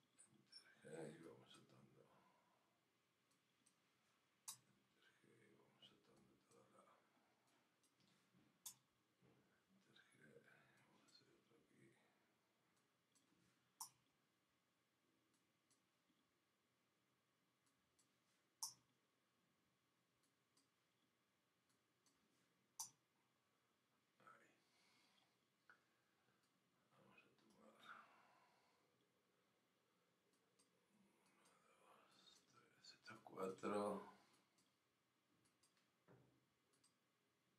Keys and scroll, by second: 2.3 g, 4.5 Return, 8.7 Return, 13.8 Return, 18.6 Return, 22.8 Return.